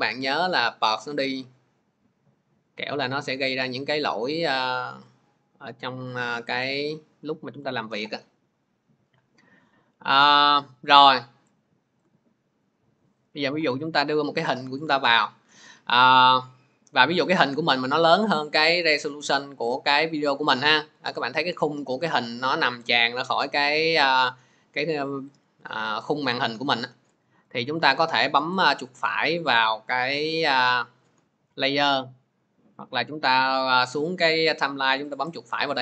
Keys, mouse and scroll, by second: 0.1 click, 3.0 middle click, 6.5 click, 7.5 middle click, 10.2 click, 27.3 middle click, 28.4 right click, 33.1 click, 34.0 click, 35.1 right click.